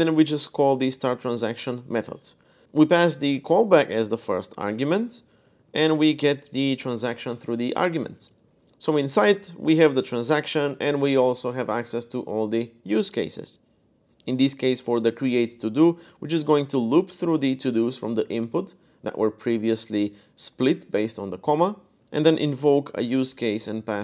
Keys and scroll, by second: 0.4-6.3 typing, 8.0-9.1 typing, 15.2-17.0 typing, 22.0-22.3 typing, 23.4 Escape.